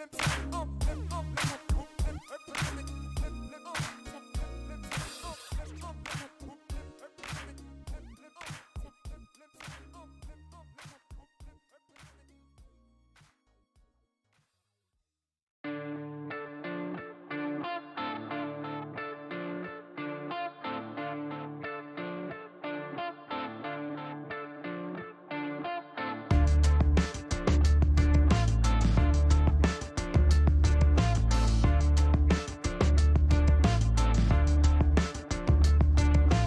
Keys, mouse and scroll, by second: 1.6 middle click, 2.4 shift+right click, 3.6 shift+right click, 4.4 shift+middle click, 5.0-5.3 scroll up 4, 5.7 middle click, 6.3 shift+right click, 7.6 shift+scroll up 2, 7.8 middle click, 8.7 click, 10.2 ctrl+click, 15.5 click, 18.4 click, 21.2 click, 22.6 scroll down 2, 23.2 click, 24.4 space, 27.7 click, 28.9 middle click, 29.2 scroll down 2, 30.1-30.5 scroll up 2, 30.7 middle click, 31.0 scroll up 1, 32.0 click, 32.4 click, 33.4 click, 34.0 scroll up 1, 35.2 scroll down 1, 35.9 click.